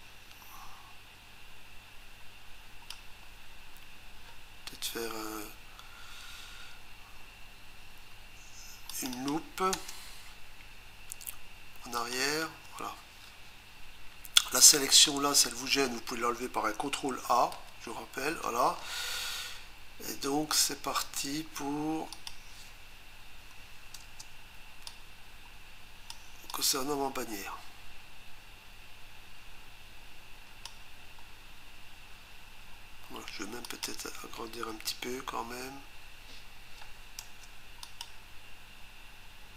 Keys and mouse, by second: 8.9 click, 9.1 click, 9.3 double click, 9.7 Return, 22.1 click, 24.0 Return, 24.9 click, 26.5 click, 33.7 click, 37.2 Return, 37.8 click.